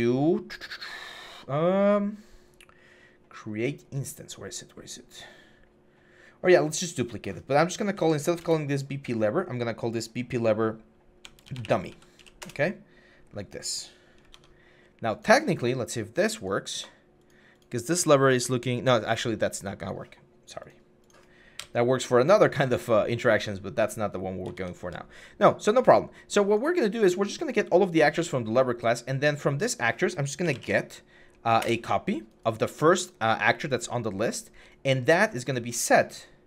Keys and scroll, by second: 7.8 Right, 8.2 BackSpace, 11.2-12.5 typing, 14.1 alt+Tab, 15.0 alt+Tab, 21.4 Delete, 24.3 alt+Tab, 24.7 alt+Tab, 30.2 typing, 31.4 Return.